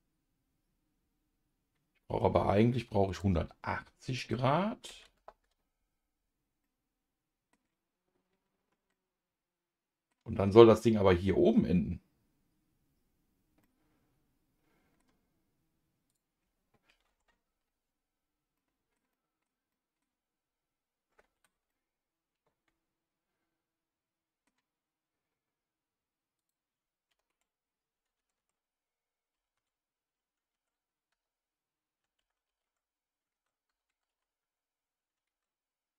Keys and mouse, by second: 5.3 click, 6.6 middle click, 8.9-10.1 middle drag, 13.6-15.0 middle drag, 16.1-21.4 drag, 21.7-24.5 middle drag, 26.4-35.9 drag, 28.4 shift+Tab.